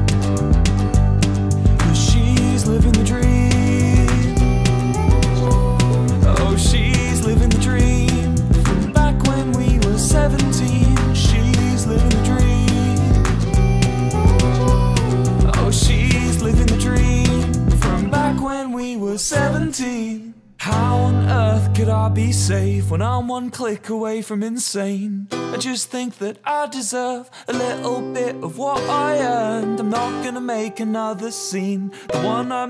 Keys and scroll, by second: 1.8 shift+p, 2.1 space, 4.0 space, 10.6 ctrl+d, 19.4 ctrl+d.